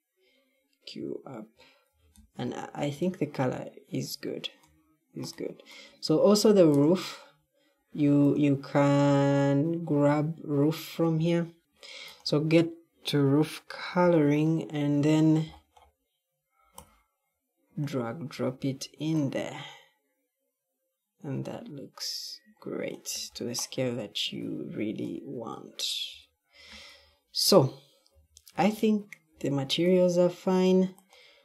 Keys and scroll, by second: 1.8 q, 2.6 q, 26.0 e, 26.4 e, 26.8 e, 28.0 d, 28.4 d, 29.2 d.